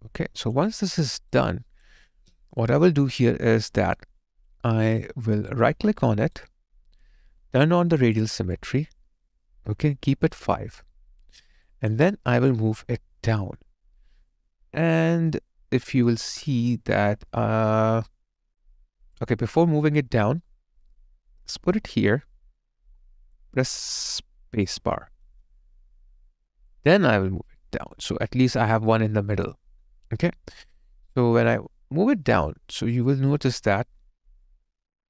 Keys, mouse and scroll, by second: 0.9 alt+right click, 1.5 alt+click, 2.0 alt+right click, 2.6 alt+middle click, 3.1 alt+click, 6.3 right click, 11.1 alt+right click, 11.7 alt+click.